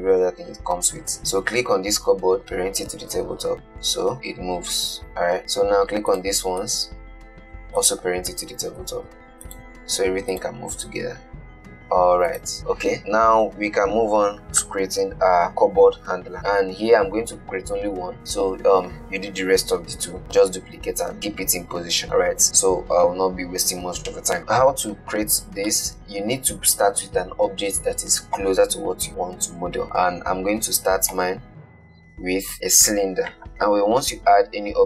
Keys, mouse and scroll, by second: 1.4 click, 2.4 shift+click, 3.4 ctrl+p, 3.7 click, 4.1 g, 5.4 click, 6.9 shift+click, 8.1 shift+click, 9.1 ctrl+p, 9.7 click, 10.6 click, 11.4 g, 25.9-29.0 middle drag, 31.4 shift+a.